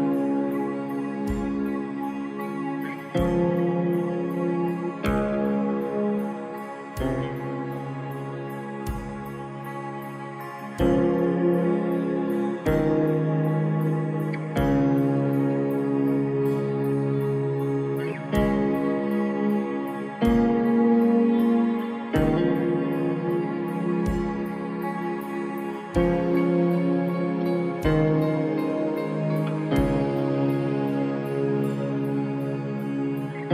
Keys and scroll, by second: 0.4 ctrl++, 1.2 space, 22.6 space, 30.8 ctrl+-.